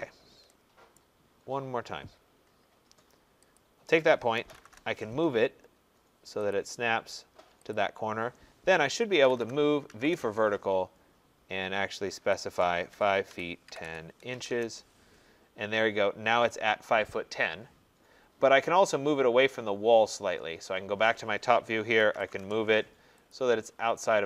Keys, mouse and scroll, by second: 0.0-0.6 typing, 0.1 middle click, 1.0 right click, 1.6 middle click, 1.6 middle click, 1.7 middle click, 2.1 middle click, 2.2 middle click, 2.5 middle click, 2.5 middle click, 2.6 middle click, 2.7 middle click, 3.6 click, 4.1-5.1 typing, 6.6 click, 7.8 click, 8.9-10.0 typing, 12.4 click, 12.7-14.8 typing, 19.4 middle click, 19.7 middle click, 19.7 middle click, 19.9 middle click, 20.1 middle click, 20.2 middle click, 20.3-20.8 middle click, 20.6 middle click, 20.7 middle click, 21.8-22.8 typing, 23.3 click.